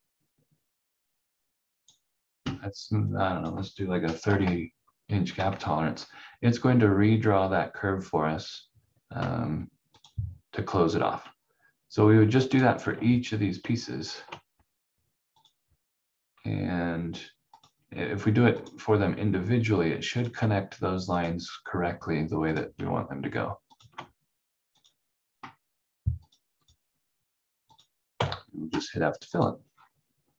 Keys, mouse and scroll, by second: 4.2 3, 5.3 Tab, 10.0 click, 13.9 ctrl+click, 20.1 ctrl+click, 23.7 ctrl+click, 28.1 f, 29.3 click, 29.6 scroll down 1.